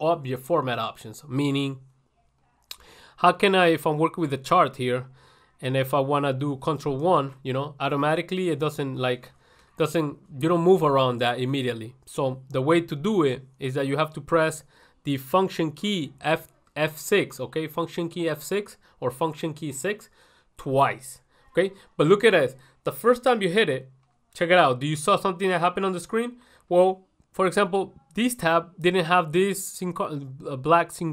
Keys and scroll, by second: 2.6 ctrl+1, 26.9 ctrl+1.